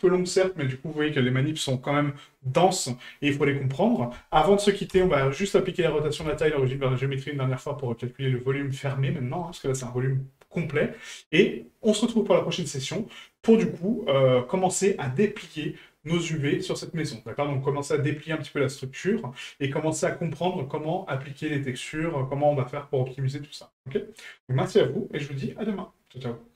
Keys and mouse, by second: 8.5-9.4 middle drag.